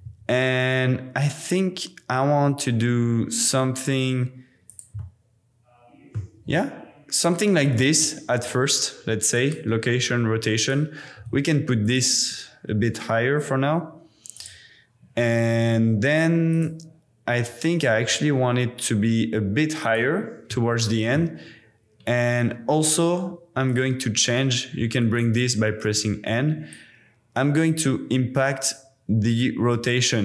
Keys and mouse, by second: 0.0 z, 4.7 click, 5.1-6.7 middle drag, 6.4 g, 7.2 click, 8.4 i, 11.1 g, 11.3 z, 14.3 click, 16.5 click, 17.9 g, 18.1 z, 19.8 click, 20.5-22.2 drag, 22.3 n, 23.7-25.0 drag, 26.8-30.2 drag.